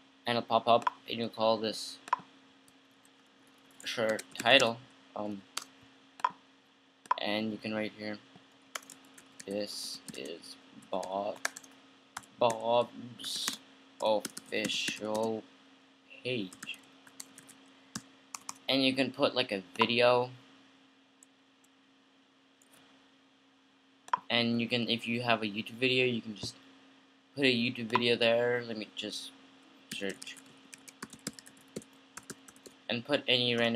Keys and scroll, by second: 3.1-5.8 typing, 8.9-18.1 typing, 29.9-33.3 typing.